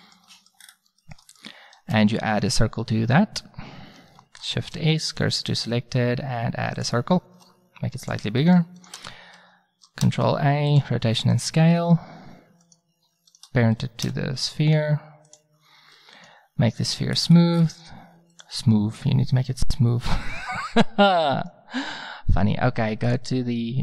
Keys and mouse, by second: 1.9 shift+a, 4.5 shift+s, 5.5 shift+a, 7.4 s, 8.8 right click, 10.1 ctrl+a, 10.1 click, 14.1 ctrl+p, 17.2 click, 18.0-18.3 middle drag, 18.3-20.0 drag, 21.3-23.8 drag.